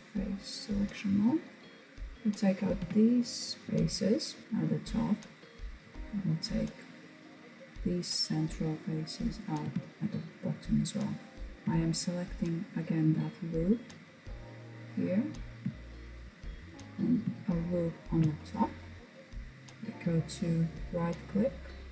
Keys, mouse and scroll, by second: 1.9 Delete, 4.4 middle click, 5.0-6.3 scroll up 2, 6.3 click, 8.7 Delete, 11.4 alt+click, 12.1-12.5 scroll down 2, 12.5-14.1 middle drag, 14.1-15.7 scroll up 2, 15.7-16.5 scroll up 1, 16.5 alt+shift+click, 17.4-19.7 scroll down 2, 19.7-21.9 right drag.